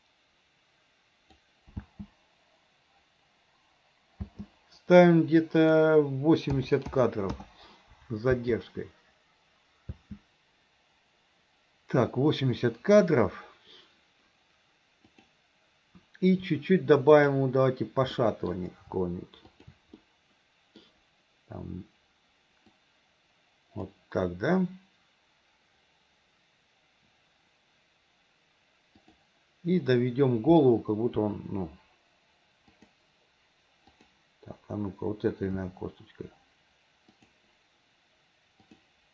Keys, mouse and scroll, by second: 1.8 space, 5.6-7.5 drag, 5.6 space, 8.4 space, 10.0 space, 15.1 click, 17.1 shift+click, 18.3 middle drag, 19.5 shift+click, 20.0-20.9 middle drag, 22.7-23.9 drag, 29.0 click, 31.3 g, 33.9 click, 35.6 r.